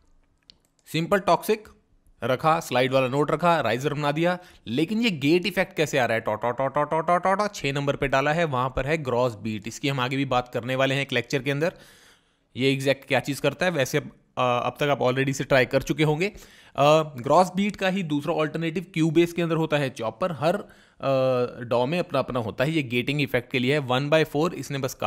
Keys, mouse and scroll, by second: 12.0 click.